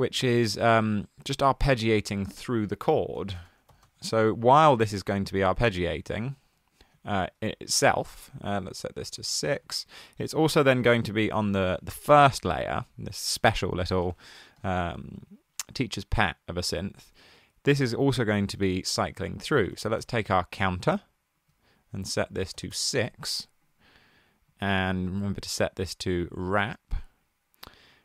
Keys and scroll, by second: 3.2-4.3 typing, 9.2 typing, 18.6 super+a, 19.3-20.5 typing, 22.6 typing.